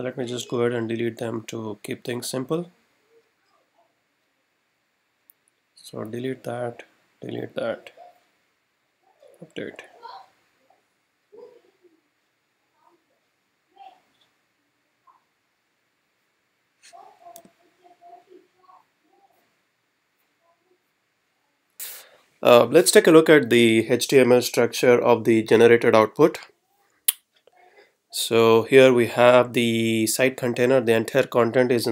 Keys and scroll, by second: 17.4 r, 25.6 F12, 30.7 Left.